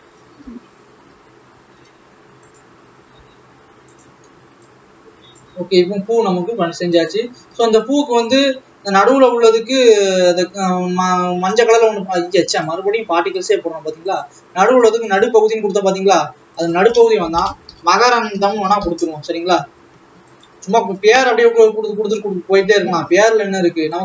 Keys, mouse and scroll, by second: 0.2 shift+l, 1.2 r, 3.2 g, 4.7 click, 5.7 alt+a, 7.2 click, 7.7 ctrl+s, 8.0 click, 8.5 alt+a, 9.2 l, 10.5 click, 12.7-14.0 drag, 15.4-21.3 drag, 21.3 alt+a, 22.7 l.